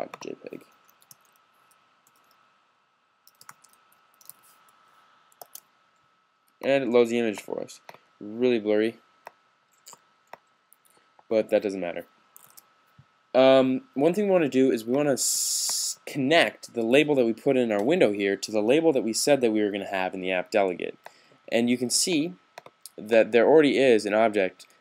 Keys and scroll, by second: 0.5-5.3 typing, 5.3 super+s, 12.1 s.